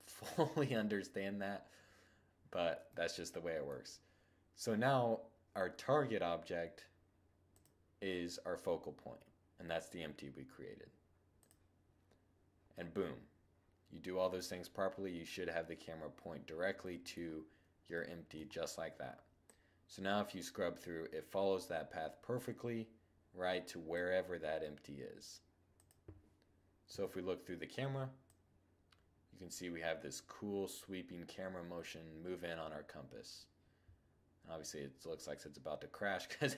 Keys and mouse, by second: 2.0 click, 2.0 middle click, 3.3 middle click, 6.6-8.6 drag, 11.9-13.6 middle drag, 15.9-18.0 middle drag, 18.6-20.4 drag, 24.8-26.0 drag, 26.0 0, 26.2 click, 27.3-28.8 drag, 29.1 click.